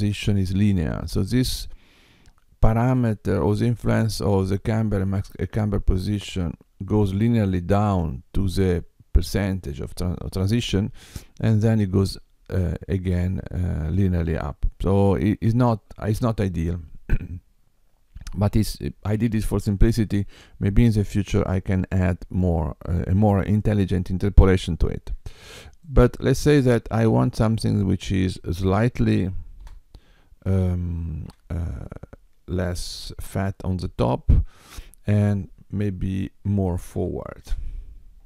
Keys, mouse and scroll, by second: 25.8 click.